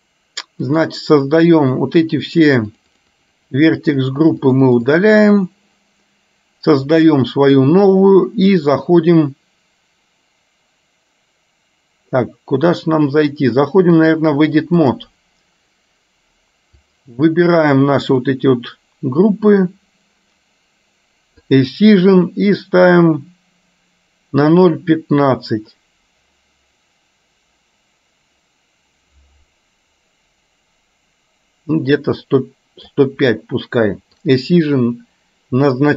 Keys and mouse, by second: 0.8 click, 2.3 click, 3.3-5.3 drag, 7.1 click, 14.0-15.2 drag, 17.1-18.3 drag, 21.6 click, 22.7-33.0 drag, 34.3 click.